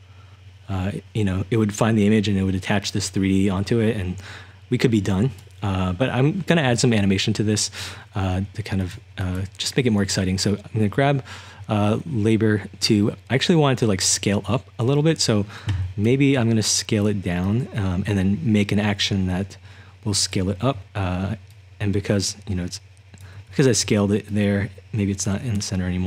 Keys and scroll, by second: 16.1 s, 20.7-23.3 typing.